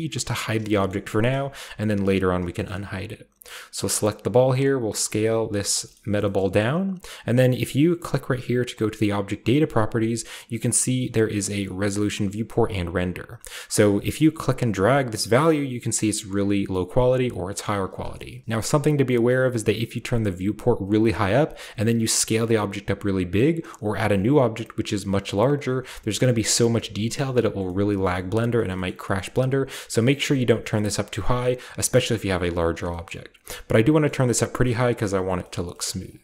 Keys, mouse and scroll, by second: 0.5-2.4 shift+scroll up 1, 0.7-2.4 shift+middle drag, 2.6-3.6 shift+middle drag, 3.5-4.3 shift+right drag, 4.3 typing, 4.8 drag, 5.4 typing, 5.6 drag, 5.8 shift+middle click, 5.9-7.0 scroll up 1, 7.0-7.8 scroll up 1, 8.7-11.1 drag, 13.0-14.1 scroll up 1, 14.1-17.8 drag, 17.8 middle click, 18.4 click, 20.2 click, 21.0 scroll down 1, 21.4 s, 22.4 right click, 22.9 scroll down 1, 23.5-24.1 scroll down 1, 24.1-24.9 scroll down 1, 24.9 scroll down 1, 25.2-26.5 scroll up 1, 26.5-27.6 scroll up 1, 27.6-28.7 middle drag, 28.1-29.9 scroll up 1, 28.8 shift+middle drag, 29.1-29.9 middle drag, 29.9-31.2 scroll up 1, 30.0-31.3 middle drag, 31.2-32.3 scroll down 2, 32.3-33.7 scroll up 4, 32.9-34.3 shift+middle drag, 33.7-35.3 scroll up 1, 34.7 shift+middle click, 35.3 shift+scroll up 1, 35.5 shift+middle click, 35.5-36.2 shift+scroll down 1, 35.8 shift+middle click.